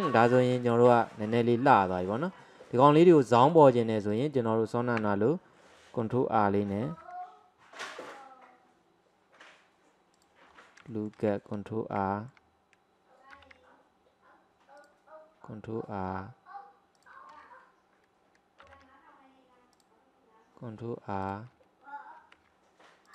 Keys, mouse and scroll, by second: 0.3 click, 1.1-2.4 middle drag, 2.4-2.7 scroll up 1, 2.7-3.6 middle drag, 3.6 drag, 4.2 click, 5.0 Tab, 7.0 ctrl+r, 10.5-11.0 scroll up 1, 11.0-13.4 shift+middle drag, 13.4 ctrl+r, 18.7 ctrl+r, 22.2 ctrl+r.